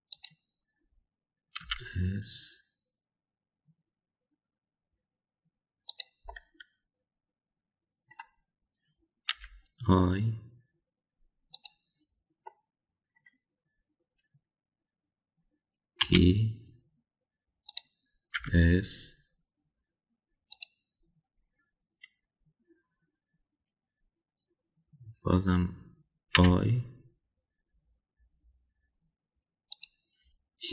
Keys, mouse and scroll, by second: 2.5 s, 7.2-9.1 middle drag, 10.3 i, 13.5 middle click, 16.9 e, 19.4 s, 27.3 i.